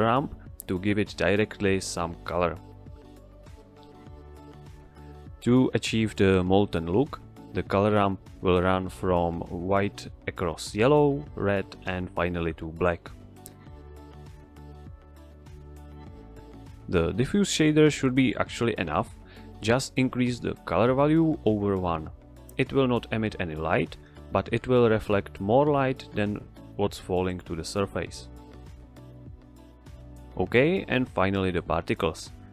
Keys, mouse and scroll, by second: 1.1 click, 4.5 click, 6.4-7.6 drag, 17.8-18.2 drag, 19.6 middle click, 19.9-20.3 scroll up 1, 20.3-20.9 scroll down 1, 21.8 click, 22.2 middle click, 22.7-23.0 click, 23.8 x, 24.2-24.9 click, 25.2 shift+a, 26.1 click, 27.9 Return, 29.8 scroll down 1, 30.1-30.5 middle drag.